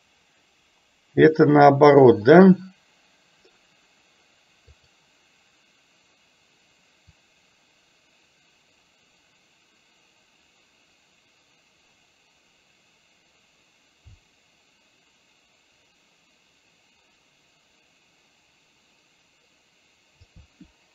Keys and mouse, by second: 4.9 click, 7.2-20.3 drag.